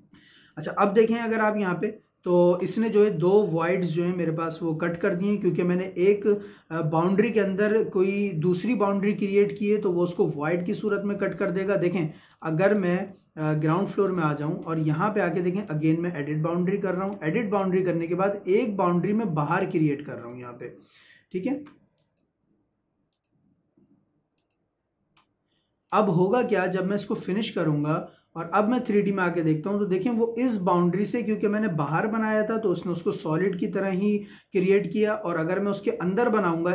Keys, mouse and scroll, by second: 0.4 scroll up 1, 1.1-12.3 shift+middle drag, 12.3 click, 17.0-17.3 scroll down 1, 17.3 middle click, 18.5 click, 21.4 Escape, 22.0 click, 23.0 Escape, 23.1 click, 25.6 Escape, 25.9-26.2 scroll up 1, 26.3 Escape, 26.7 click, 29.2 Escape.